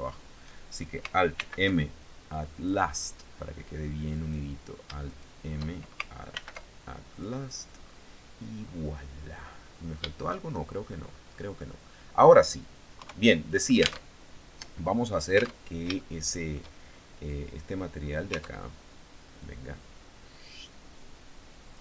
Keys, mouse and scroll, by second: 0.9 alt+m, 2.1 click, 3.7 right click, 4.6 shift+right click, 5.9 alt+m, 6.7 click, 7.3-8.4 scroll down 5, 9.2 scroll up 2, 10.0 shift+middle click, 10.6-11.1 scroll down 2, 11.2 middle click, 12.5 KP_3, 13.6 alt+Tab, 15.2 alt+Tab, 15.5 shift+middle click, 16.4-16.7 shift+scroll down 3, 17.8 Tab, 18.9-21.5 drag.